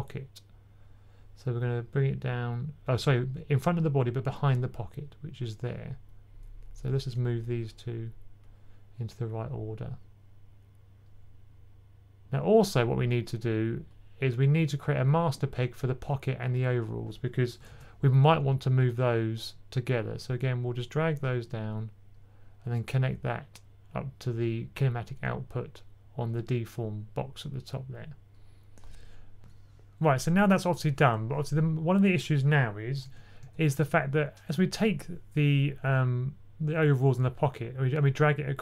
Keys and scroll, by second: 17.6 super+p, 33.3 typing.